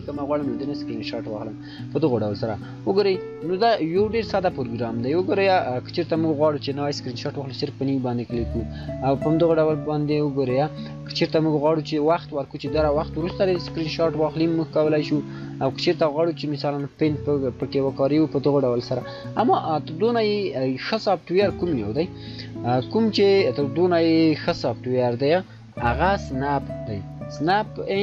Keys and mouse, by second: 2.2-5.4 shift+drag, 9.2 shift+click, 15.7-22.1 shift+drag, 22.6 shift+click, 25.3-26.9 typing.